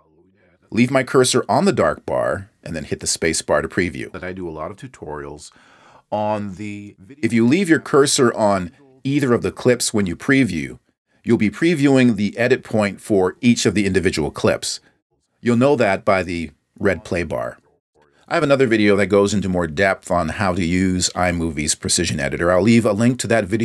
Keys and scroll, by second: 4.0 space, 9.6 space, 16.5 space.